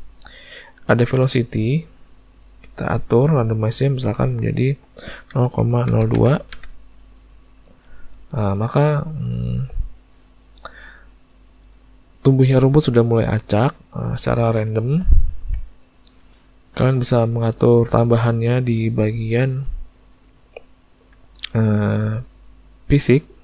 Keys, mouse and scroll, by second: 4.2 click, 8.4 middle click, 10.5 ctrl+middle click, 13.9 ctrl+middle click, 14.3 ctrl+middle click, 14.8 shift+middle click, 15.2 ctrl+middle click, 16.8 click.